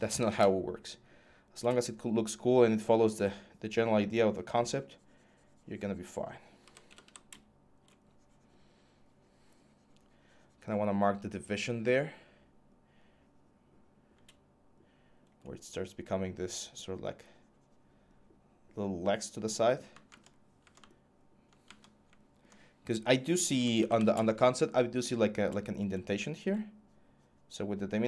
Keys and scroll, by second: 0.0-1.4 typing, 6.1-7.3 typing, 23.1-24.3 typing.